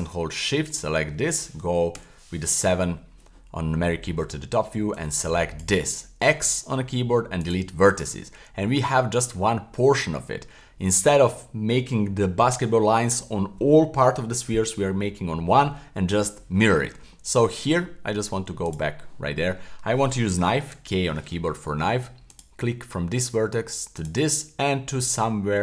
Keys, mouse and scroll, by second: 0.0 shift+click, 2.0 KP_7, 4.9 shift+click, 6.2 x, 8.1 middle click, 9.5-10.6 middle drag, 10.5 scroll up 1, 10.8 middle click, 16.8-17.1 scroll up 1, 17.1 middle click, 18.7 click, 20.7 k.